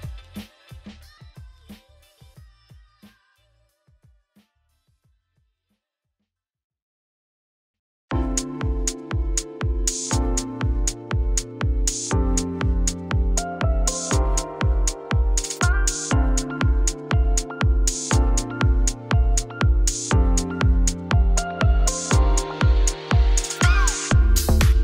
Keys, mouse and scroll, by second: 0.5 Tab, 0.8 scroll down 3, 1.0 middle click, 1.9-2.4 scroll up 5, 2.4-3.6 shift+middle drag, 3.6 click, 5.0-8.4 middle drag, 9.0-10.7 drag, 10.7 ctrl+z, 11.8 click, 12.2 middle click, 12.4 Tab, 12.6 click, 14.7 scroll down 1, 14.8 middle click, 15.5 z, 15.8 z, 16.0 scroll up 1, 16.9 click, 17.4 Tab, 18.5 shift+click, 18.8 g, 21.0 Tab, 21.1-21.8 scroll down 1, 21.8-23.2 scroll down 1, 23.2-24.3 scroll down 1, 24.3-24.8 scroll down 1.